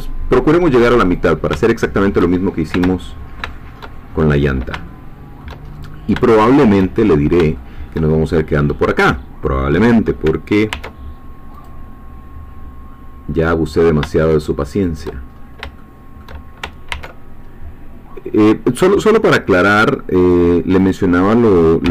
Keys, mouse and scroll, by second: 1.1 click, 1.7 shift+middle click, 2.9-3.5 shift+scroll down 2, 3.5 shift+middle click, 4.9 shift+middle click, 5.7-6.3 shift+scroll up 4, 6.3 shift+middle click, 7.0-7.4 shift+scroll up 3, 7.5 shift+middle click, 8.2 shift+scroll down 2, 10.7 ctrl+r, 11.5 click, 14.8 shift+click, 15.3-15.8 shift+scroll up 4, 15.8 shift+middle click, 16.9 ctrl+r, 18.4 click, 20.2 click, 21.8 g.